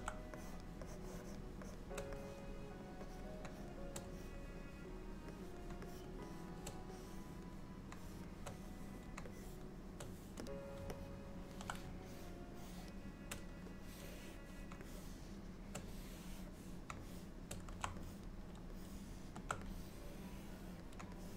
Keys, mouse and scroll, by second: 0.5 shift+click, 0.9 shift+click, 2.3 click, 3.2 click, 3.6 shift+click, 4.2 click, 5.4 click, 5.9 shift+click, 6.3 shift+click, 7.0 click, 8.1 shift+click, 8.7 click, 9.4 click, 9.7 shift+click, 11.0 middle click, 12.2 shift+click, 12.2 shift+click, 12.6 shift+click, 14.0 click, 15.1 shift+click, 16.2 click, 17.2 shift+click, 18.1 click, 18.9 shift+middle click, 19.8 click.